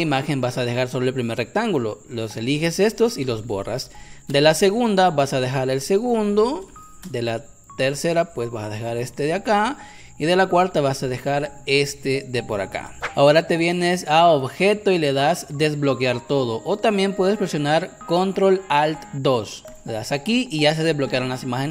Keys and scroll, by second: 2.5 Delete, 3.9 space, 5.6 Delete, 6.8 space, 8.2 Delete, 13.0 space.